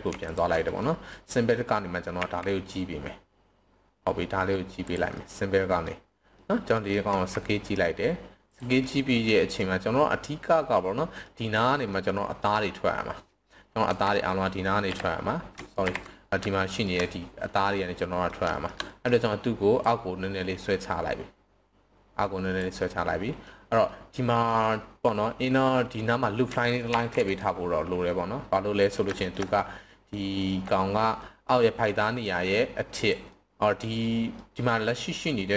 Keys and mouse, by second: 0.8 middle click, 2.2 s, 4.8 drag, 5.1-5.8 middle drag, 6.3-6.7 middle drag, 7.1 s, 8.5 drag, 8.8-9.5 middle drag, 10.9 middle drag, 11.9-12.4 middle drag, 13.8 KP_7, 16.5-16.8 shift+middle drag, 17.7-18.3 middle drag, 18.5 shift+middle click, 18.8 middle click, 19.7-22.6 drag, 22.8-23.5 middle drag, 23.8-24.5 middle drag, 26.8 ctrl+r, 28.8 drag, 29.1 shift+middle click, 29.5-30.5 middle drag, 31.2 middle drag, 32.1-33.0 drag, 33.3-33.7 middle drag, 34.3 middle click.